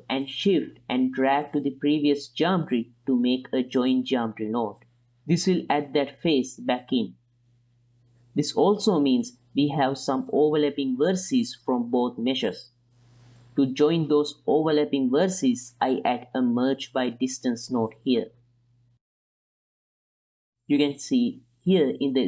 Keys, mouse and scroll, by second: 3.7 middle click, 4.5-5.6 drag, 5.7 click, 6.1 click, 7.7-10.1 middle drag, 12.5 x, 12.7 ctrl+shift+click, 13.0 click, 14.3 click, 15.1 shift+a, 17.6 click, 20.1 click.